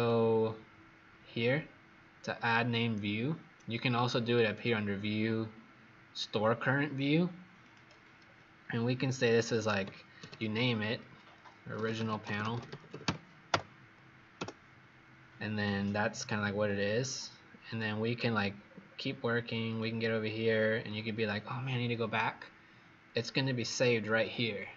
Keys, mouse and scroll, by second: 9.9-14.3 typing, 16.6 click, 18.5-19.0 scroll down 7, 19.5-23.5 scroll up 12, 23.5 click.